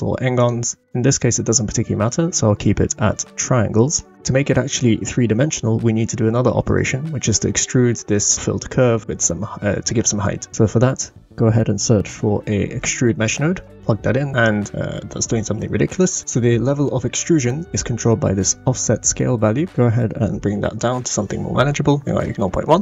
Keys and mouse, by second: 0.4 drag, 10.5 shift+a, 14.3-14.7 middle drag, 16.5 click, 16.5 right click, 19.7-20.9 drag, 22.2 shift+middle drag, 22.6-22.8 middle drag.